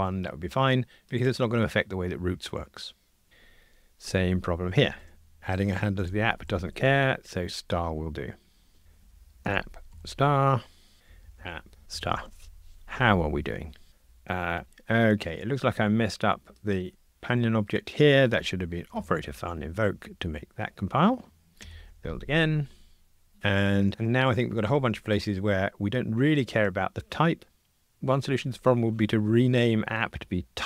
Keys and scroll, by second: 3.3 F2, 8.5 F2, 12.8 super+F9, 16.8 super+b, 19.9 Tab, 21.7 super+F9.